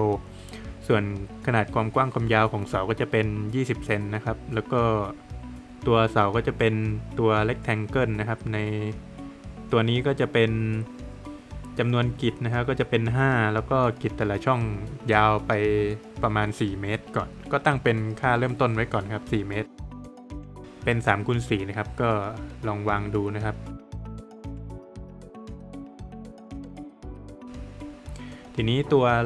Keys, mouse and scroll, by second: 11.2 click, 17.5 click, 20.0 click, 20.6 click, 27.0 middle click.